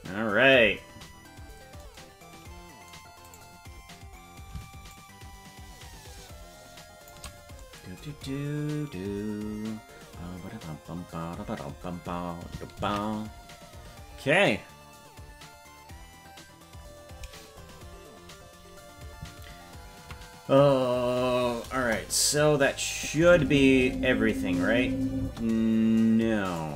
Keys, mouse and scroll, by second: 3.3 right click, 4.9-7.1 shift+drag, 8.1-9.9 scroll down 4, 15.0 ctrl+s, 21.8 KP_0, 22.9 click, 23.2 space, 25.2 space, 26.5 right click.